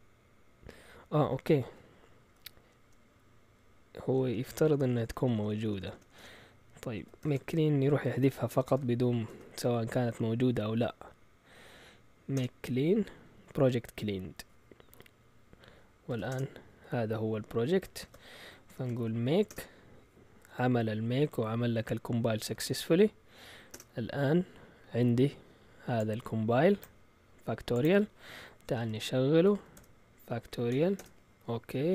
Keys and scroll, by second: 1.6 End, 2.3-4.2 typing, 7.2 typing, 8.2-12.3 typing, 12.3 Return, 16.0-16.8 typing, 18.0 ctrl+l, 18.4-19.4 typing, 19.5 Return, 22.2-23.1 typing, 23.7 Return, 29.2-30.7 typing, 30.9 Return, 31.7 Up.